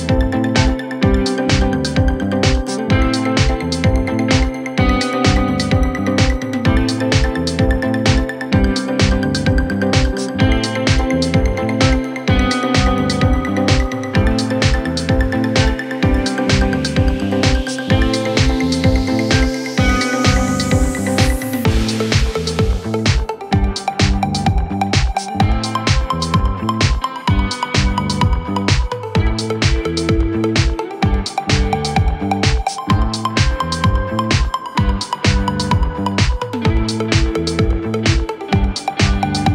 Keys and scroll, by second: 31.4 ctrl+z.